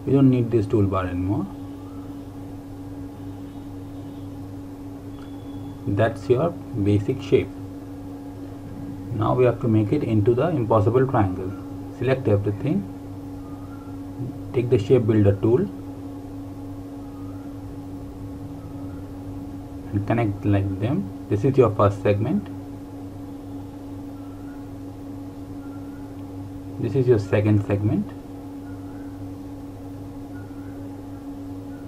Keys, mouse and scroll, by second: 0.9 click, 3.2 Delete, 4.2 click, 6.4 Delete, 9.1 click, 15.0 typing, 17.3 click, 25.8 click.